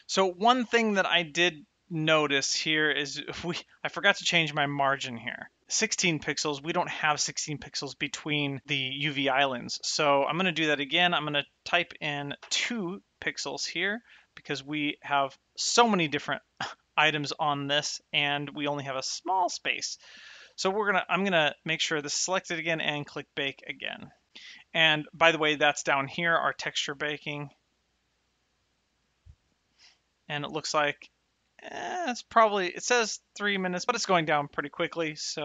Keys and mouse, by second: 11.0 click, 12.3 KP_2, 21.4 click, 23.3 click.